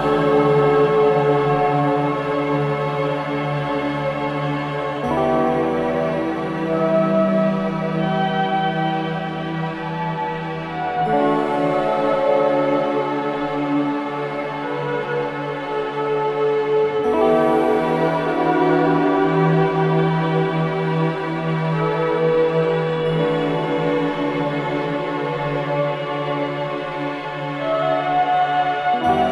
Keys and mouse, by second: 0.7 click, 6.2 click, 7.3 click, 8.4-9.4 drag, 9.8 shift+v, 10.1 shift+v, 11.5 click, 11.7 click, 16.1-17.1 drag, 17.3 click, 18.4 click, 19.8 right click, 21.1 click, 23.8-25.5 drag, 25.9-27.2 drag, 27.7-29.3 drag.